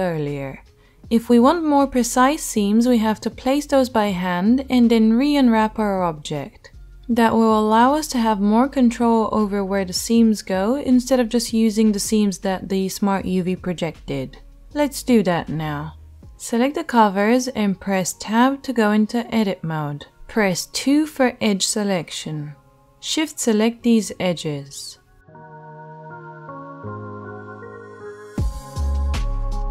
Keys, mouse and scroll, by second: 17.2 h, 17.4-20.1 drag, 17.8 Tab, 19.5 a, 20.1-23.6 right drag, 21.5 2, 23.6 middle click, 23.7 right click, 23.8 middle click, 24.4 shift+right click, 24.8 shift+middle click, 25.1 shift+right click, 25.8-29.7 shift+drag, 26.3 shift+middle click, 26.3 shift+right click.